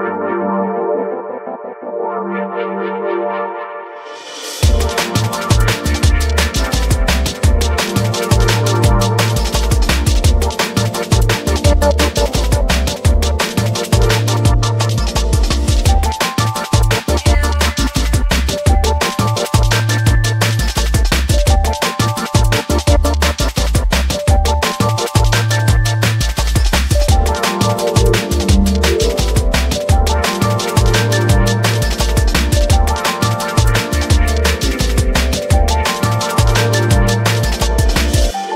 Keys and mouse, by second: 2.2 click, 3.0-4.5 drag, 5.7 click, 6.7 click, 9.5 click, 12.1 space, 12.8 click, 13.9 ctrl+Tab, 14.2 click, 15.6 r, 16.4 click, 19.4 r, 21.2 click, 21.4 click, 21.7 r, 22.2 click, 22.5 s, 23.2 click, 23.5 alt+middle click, 23.9 r.